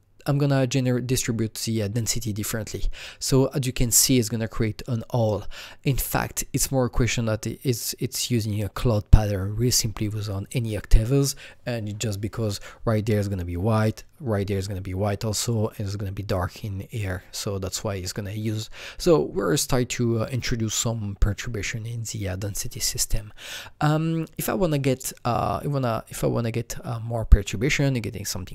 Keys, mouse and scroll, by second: 3.0-5.6 drag, 16.5 click.